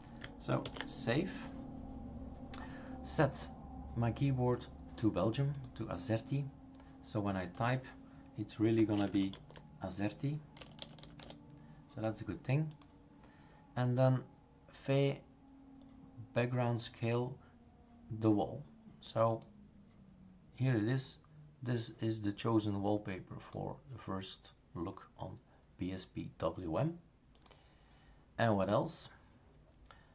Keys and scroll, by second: 0.6 ctrl+s, 8.4-11.2 typing.